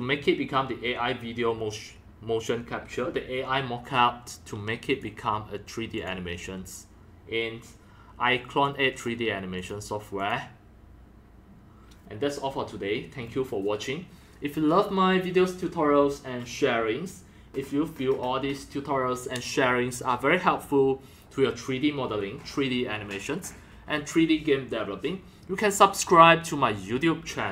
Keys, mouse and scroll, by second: 0.6-2.6 drag, 4.9 click, 6.0 click, 8.6-9.0 drag, 9.6 click, 10.2 click.